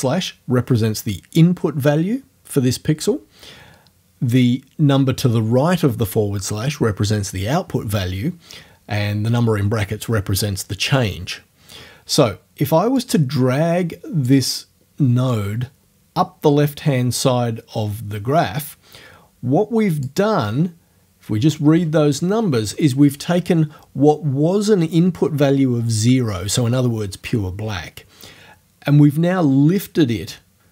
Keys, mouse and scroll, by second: 13.0-14.5 drag, 15.3-20.2 drag, 20.2 middle click.